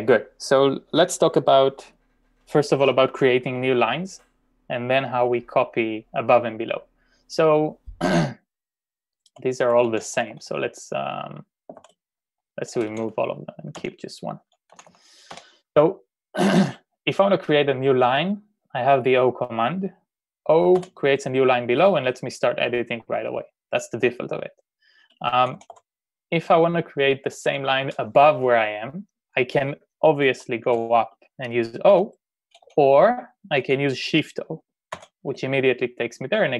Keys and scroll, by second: 9.9-10.3 typing, 11.8-15.4 typing, 20.8 shift+o, 25.1-26.3 typing, 30.9-33.5 typing, 35.0 shift+o.